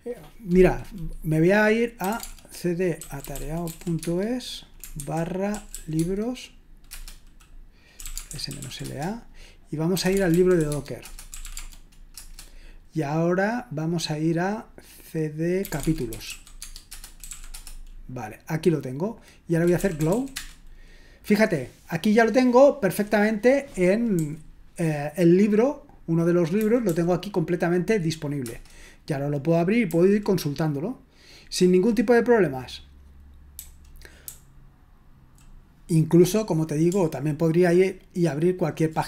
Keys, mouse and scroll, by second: 1.9-12.1 typing, 15.4-17.7 typing, 19.4-20.6 typing, 24.1 j, 26.6 typing, 28.4 Return, 29.9 j, 31.6 k, 33.5-35.4 typing.